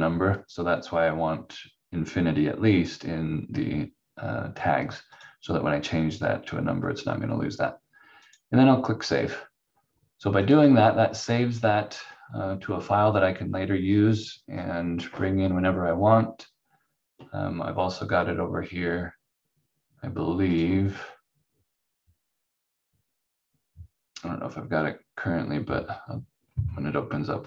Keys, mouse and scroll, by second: 5.1 click, 8.2 click, 20.5 click.